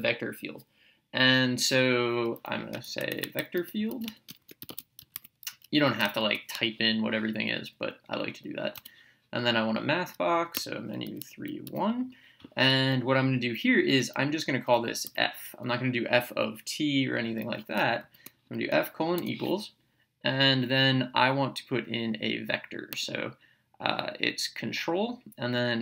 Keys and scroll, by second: 3.0-5.7 typing, 8.7 space, 10.6 Menu, 11.0 3, 11.6 1, 15.1 f, 19.1 =.